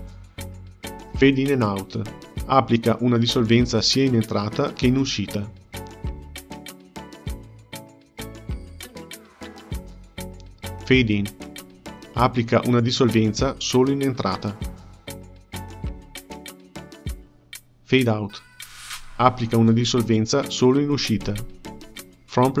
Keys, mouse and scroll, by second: 3.6 click, 4.2-7.3 right drag, 9.6 ctrl+z, 10.8 click, 11.3-14.3 right drag, 15.5 ctrl+z, 16.4-19.5 right drag, 20.0 ctrl+z, 20.3-22.6 drag.